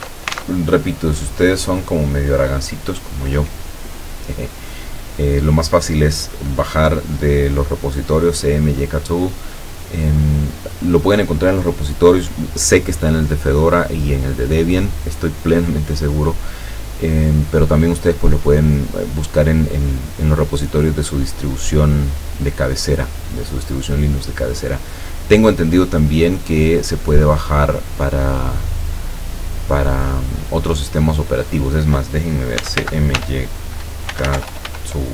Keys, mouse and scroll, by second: 0.0 alt+Tab, 1.3 click, 2.9 click, 18.0-20.6 drag, 20.7 click, 21.5 click, 22.2-24.9 drag, 31.3 click, 32.4-35.1 typing.